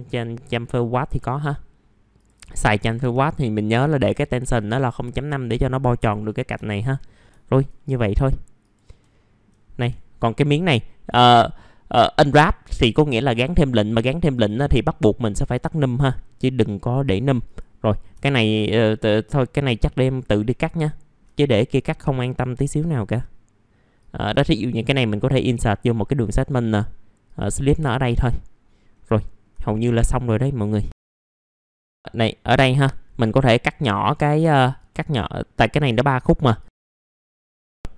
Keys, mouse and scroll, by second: 3.6 KP_0, 5.2 middle click, 5.7 scroll up 1, 5.9 F4, 6.8 scroll down 1, 7.4 alt+middle click, 7.9 scroll up 1, 8.3 alt+middle click, 8.6 click, 9.0 middle click, 9.4 click, 9.9 alt+middle click, 10.6 F4, 11.4 middle click, 15.1 click, 16.7 middle click, 17.2-17.5 scroll up 1, 17.5 right click, 18.2 click, 18.7 middle click, 19.1 alt+middle click, 19.4-19.8 scroll up 1, 20.3-21.0 scroll up 1, 21.0-21.4 scroll down 1, 21.5 alt+middle click, 22.2-22.8 scroll up 1, 23.6 click, 26.2-27.2 scroll down 1, 27.2 right click, 28.1 click, 28.5 alt+middle click, 29.5-29.9 scroll up 1, 30.0 alt+middle click, 30.6 scroll down 1, 30.9 right click, 31.2 click, 31.4 alt+middle click, 31.9 middle click, 32.1-32.7 scroll up 1, 33.3 click, 33.9 scroll down 1, 34.2 alt+middle click, 34.9-35.2 scroll up 1, 35.6 ctrl+click, 35.8 ctrl+click, 36.1 middle click, 36.7-37.3 scroll up 2, 36.9 ctrl+click, 37.6 ctrl+z, 37.6 click.